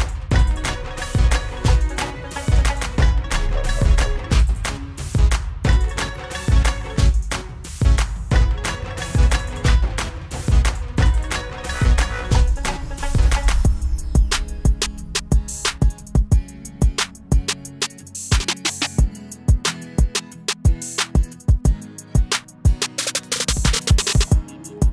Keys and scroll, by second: 10.2 ctrl+=, 10.3 ctrl+=, 15.6 ctrl+z, 16.2 Down, 16.5 Down, 16.9 ctrl+-, 17.0 ctrl+-, 19.7 ctrl+=, 19.8 ctrl+=, 23.4 ctrl+-.